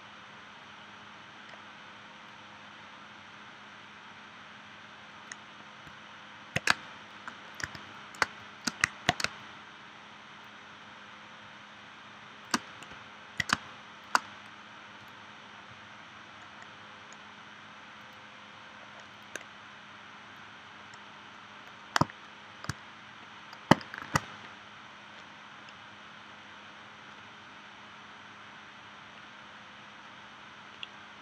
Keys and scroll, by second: 6.7 space, 7.6 v, 8.3 space, 9.2 space, 13.6 space, 24.0 shift+w.